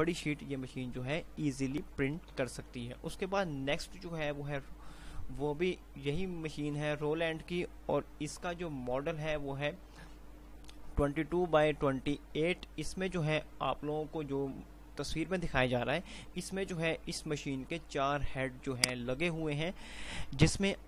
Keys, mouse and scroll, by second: 0.4 typing, 2.5 Page_Down, 19.9 click, 20.0 click.